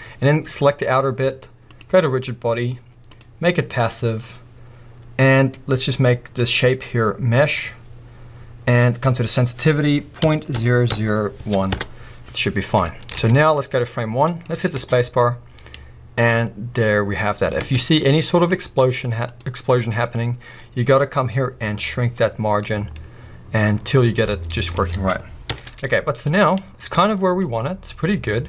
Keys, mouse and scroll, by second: 11.8 Return, 12.8-13.1 scroll up 2, 13.1 alt+a, 13.1-14.2 middle drag, 13.3-14.2 scroll down 2, 14.2-18.2 drag, 14.7 space, 17.7 space, 18.2-18.6 middle drag, 18.6-19.3 scroll up 2, 19.3 click, 22.2-22.7 scroll down 1, 22.7 middle click, 23.0-24.8 scroll up 1, 24.8 alt+a, 25.5 shift+Left, 26.4 scroll down 1, 26.5 middle click, 26.9 space.